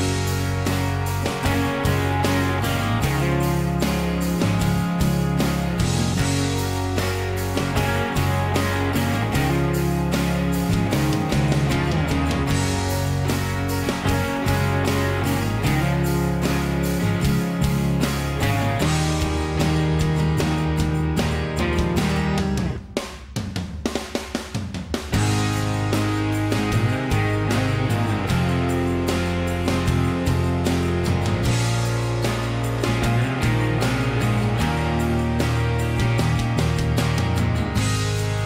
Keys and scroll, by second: 5.6 Left, 5.6 Left, 6.0 BackSpace, 6.1 BackSpace, 6.2 BackSpace, 6.4 Right, 6.6 Right, 7.0 2, 13.1 Escape, 13.2 Escape, 13.5 ctrl+a, 14.0 ctrl+h, 32.4 Delete, 33.2 ctrl+z, 34.9 Delete, 35.6 Delete, 36.3 ctrl+z, 37.2 Delete, 38.1 Escape, 38.2 Escape.